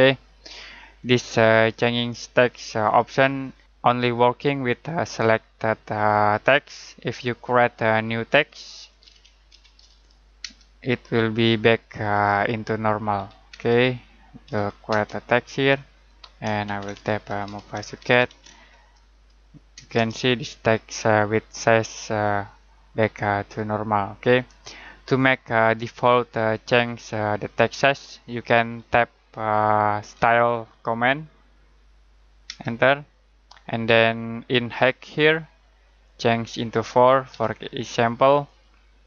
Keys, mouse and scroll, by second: 1.0 click, 2.3 Escape, 7.4 click, 8.8-10.4 typing, 11.8 click, 13.1 1, 13.5 space, 14.4 0, 14.9 space, 16.4-18.7 typing, 19.7 Return, 30.2-30.9 typing, 32.4 space, 36.0 click, 37.3 4, 38.4 click.